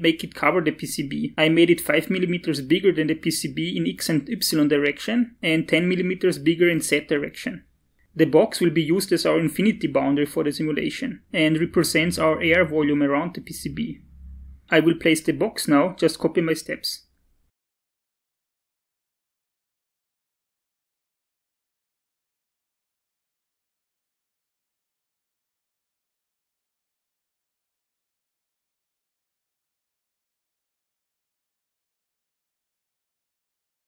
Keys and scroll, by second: 22.6 5, 23.0 0, 23.2 Return, 28.2 Up, 29.6 Down, 29.9 Tab, 30.3 Down, 30.8 Tab, 31.1 Up, 31.6 Up, 32.0 Tab, 32.1 Up.